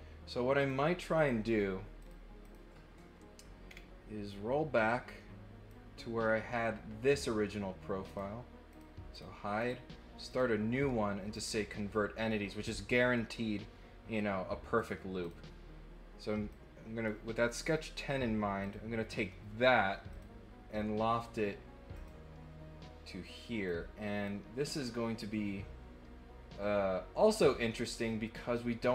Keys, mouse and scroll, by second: 0.5 click, 1.2 click, 1.9 click, 2.4 click, 3.6 middle click, 4.2-5.7 drag, 8.0 click, 8.6 click, 9.1 click, 9.5 click, 10.2 click, 11.3 click, 14.7 click, 15.2 click, 16.5 click, 18.6 click, 20.1 click, 21.9 click, 23.6 click, 25.3-28.2 middle drag.